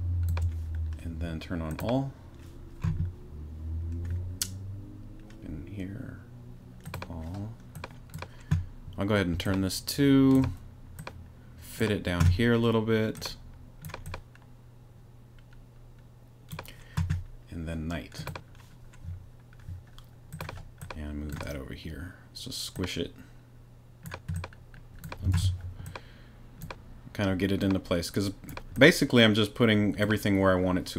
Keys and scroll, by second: 25.3 shift+super+z.